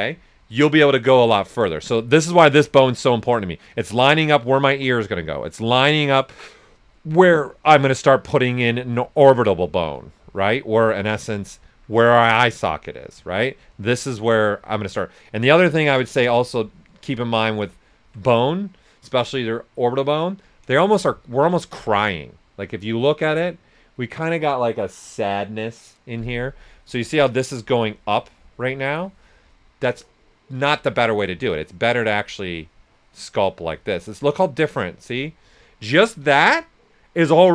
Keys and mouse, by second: 1.4 right click, 2.3 click, 7.5 shift+click, 8.1 right click, 9.0-11.2 alt+drag, 11.2 right click, 12.0 right click, 13.7-21.2 alt+drag, 21.2 ctrl+z, 26.7 ctrl+z, 27.6-30.6 alt+drag, 30.6 ctrl+z, 31.5-35.7 alt+drag, 35.7 alt+right click.